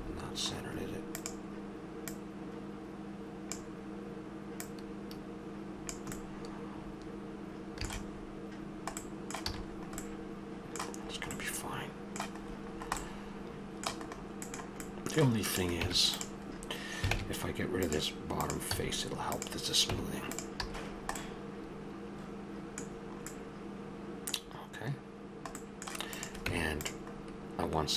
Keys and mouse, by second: 0.4 middle click, 1.2-3.2 drag, 6.2-7.5 middle drag, 9.5 a, 9.7-10.7 middle drag, 15.5-17.1 right drag, 15.7 Tab, 17.1 ctrl+Tab, 18.4 click, 18.7 x, 19.9 Tab, 20.6 a, 25.6 middle click, 26.4 Tab.